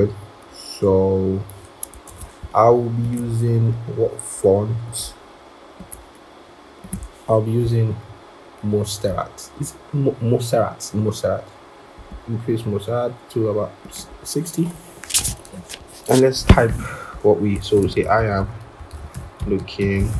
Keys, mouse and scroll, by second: 0.5-0.9 scroll, 2.0 ctrl+-, 3.4 scroll, 17.6-20.1 typing.